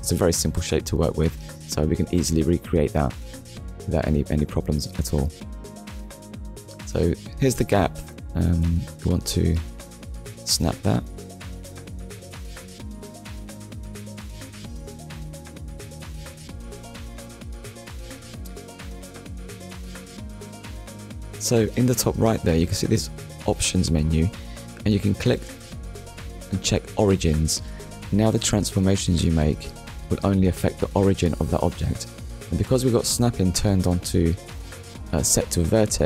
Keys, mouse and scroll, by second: 2.9 middle click, 6.0 KP_1, 6.7 scroll up 1, 7.2 shift+middle click, 8.2 scroll up 1, 8.7 scroll down 1, 9.4 shift+middle click, 10.1 middle click, 12.3 KP_1, 13.0 scroll up 1, 13.7 shift+middle click, 25.3 click, 27.8 click, 34.6 click.